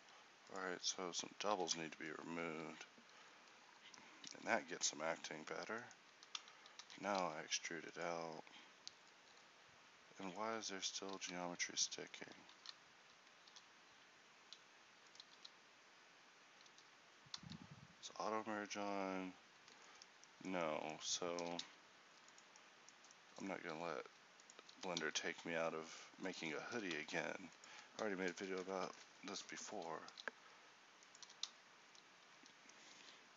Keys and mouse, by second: 1.5 z, 3.4 z, 4.3 c, 6.4 z, 6.9 e, 7.2 s, 11.2 ctrl+z, 13.5 e, 15.5 s, 17.5 ctrl+z, 19.9 middle click, 20.3 middle click, 20.9 middle click, 21.5 e, 23.8 s, 24.8 g, 26.9 e, 30.1 s, 31.3 e, 33.0 s.